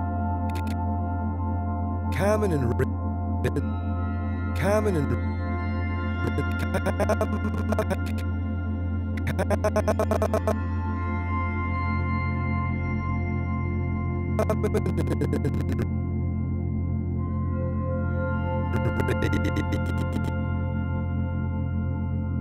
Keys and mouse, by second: 1.3-2.6 typing, 3.4 click, 3.8 space, 4.9 space, 6.2-10.4 drag, 11.9 g, 13.0 click, 14.3-15.8 drag, 14.4 typing, 16.2 typing, 17.4 click, 18.7-20.1 drag, 20.6 g, 22.1 click.